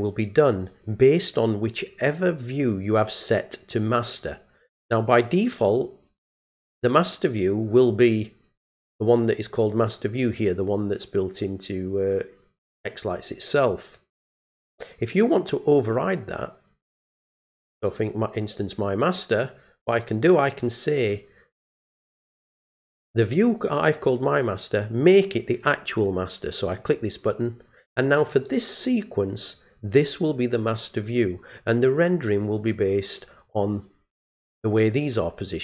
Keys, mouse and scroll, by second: 15.9 click, 17.5 click, 26.8 click.